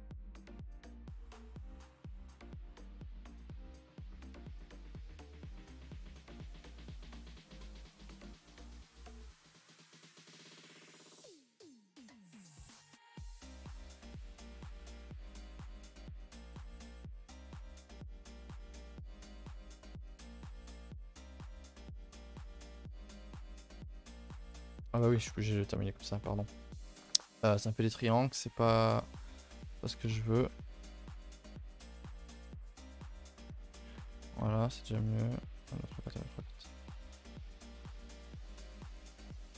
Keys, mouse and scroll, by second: 0.6 click, 0.9 shift+middle click, 1.1-2.0 scroll up 1, 2.0 click, 2.3 middle click, 2.5 a, 2.7 a, 2.9-4.4 shift+middle drag, 4.4 k, 7.0 middle click, 7.5 click, 7.7 middle click, 8.3 g, 9.6 click, 9.8 g, 10.4 click, 10.5 g, 11.0 middle click, 11.4 shift+middle click, 11.6 scroll up 1, 11.7-12.9 typing, 12.0 scroll down 1, 13.3-14.0 scroll down 2, 14.0 click, 14.3-14.8 scroll up 1, 14.8 2, 14.9 click, 15.7 ctrl+End, 16.1 ctrl+Delete, 16.8 ctrl+z, 17.5 ctrl+Delete, 17.9 ctrl+z, 18.5-19.5 right drag, 19.5 middle click, 19.7 1, 20.0 middle click, 20.2 a, 20.4 a, 21.0 click, 21.4 a, 21.6 a, 21.9 middle click, 22.5 click, 22.8 middle click, 24.9 c, 25.8 middle click, 27.6-28.5 scroll up 1, 28.5 shift+middle click, 29.1-29.4 scroll up 1, 29.4 click, 30.3 ctrl+shift+b, 33.5 a, 33.6 a, 33.9 Tab, 34.3 Tab, 35.0 click, 36.6 Tab, 37.3 click, 37.6 scroll down 2, 37.8 a, 38.0 a, 38.0 middle drag, 38.5 scroll down 1, 38.9 middle click, 39.5 KP_0.